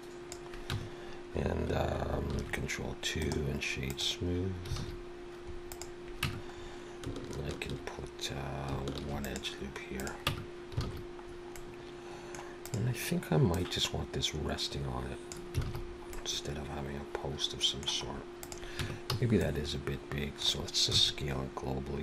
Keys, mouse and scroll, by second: 0.7 Tab, 2.3 ctrl+2, 3.2 right click, 4.8 alt+a, 5.7 click, 6.2 Tab, 6.6-7.0 scroll up 2, 9.0 ctrl+r, 10.3 Tab, 10.8 alt+a, 11.3-11.7 scroll down 2, 11.5 middle click, 12.6 click, 13.5 click, 15.7 alt+a, 15.8-16.5 scroll down 3, 16.1 middle click, 18.1-18.7 scroll up 2, 18.4 click, 18.8 Tab, 19.1 a, 19.4 middle click, 20.9 s.